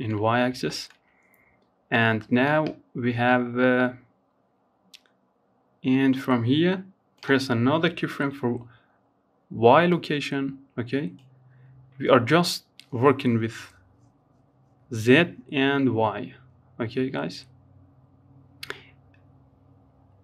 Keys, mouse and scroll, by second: 0.1-3.2 drag, 6.3 typing, 18.6-20.2 drag.